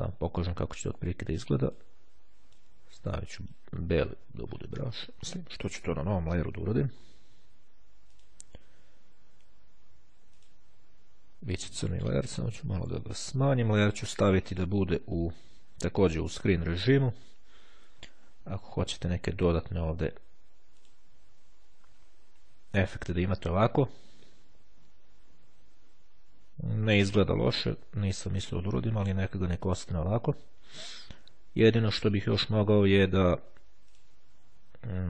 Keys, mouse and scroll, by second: 1.7 click, 2.5 click, 3.4 click, 7.5 click, 10.5 click, 12.6 [, 14.2 click, 16.0-16.9 drag, 18.0 [, 20.4 click, 34.0 click.